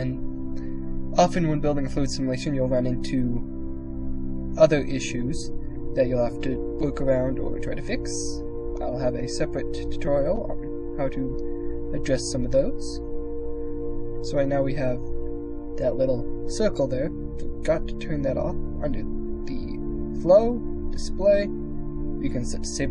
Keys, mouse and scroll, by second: 2.3 click, 4.9 middle click, 6.5 click, 7.2 middle click, 8.4 middle click, 9.7 middle click, 12.8 middle click, 18.3 click, 21.9 click.